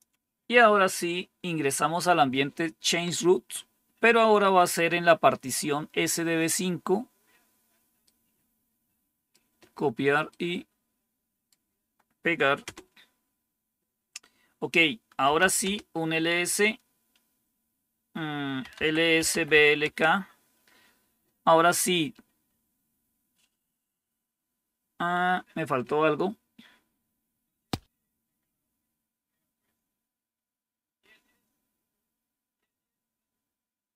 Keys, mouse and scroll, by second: 4.9-6.4 drag, 7.9-9.2 right drag, 10.2-12.1 right drag, 12.5 Return, 14.9-15.8 typing, 18.2-19.9 typing.